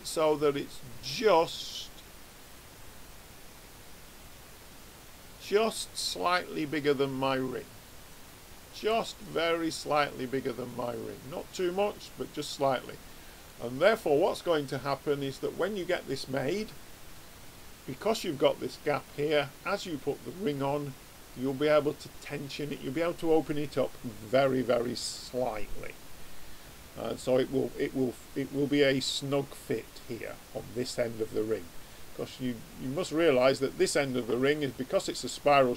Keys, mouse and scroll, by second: 8.8-10.7 middle drag, 13.4-23.9 middle drag, 30.9-32.6 middle drag, 34.5-35.7 middle drag.